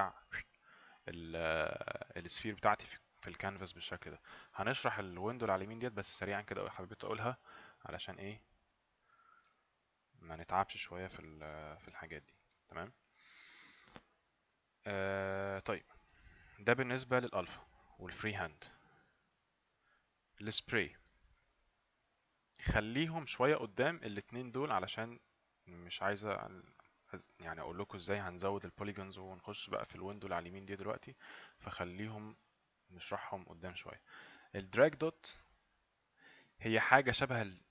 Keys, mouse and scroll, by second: 8.1 right click, 9.6 right click, 10.8 right click, 12.1 right click, 12.8 right click, 15.7 alt+Num_Lock, 15.8 alt+right click, 19.7 click, 35.7 click.